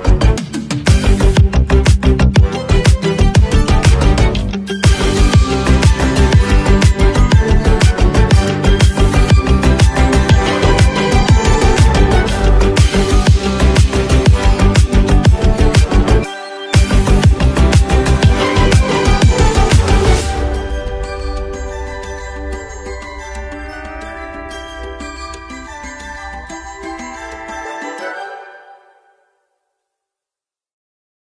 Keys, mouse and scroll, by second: 1.7-17.8 drag, 21.1-27.1 drag, 28.4 right click, 29.3-31.2 drag.